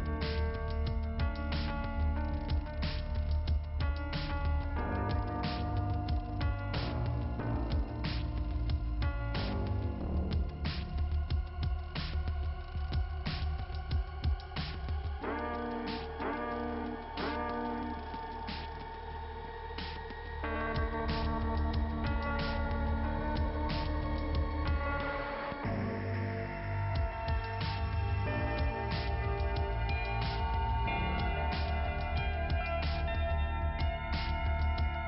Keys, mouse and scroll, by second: 1.2 click, 2.5 scroll down 2, 4.2 click, 4.8 click, 5.0 click, 5.6 click, 7.4 scroll down 2, 8.2 scroll up 1, 10.2 click, 10.3 click, 11.5 click, 12.4 click, 14.9 click, 16.1 click, 16.6 click, 18.2 click, 23.9 click, 25.3 scroll up 2, 26.5 scroll down 1, 27.6 click, 28.7 click, 29.4 click, 31.5 scroll up 2, 34.2 scroll down 2, 34.3 right click, 34.6 right click.